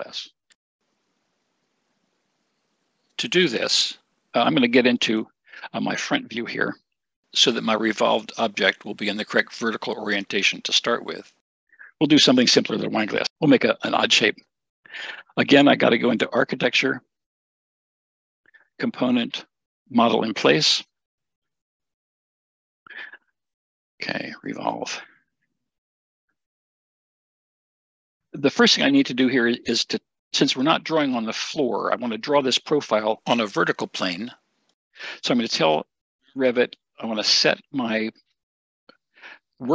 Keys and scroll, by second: 25.3 r, 26.8-28.5 typing.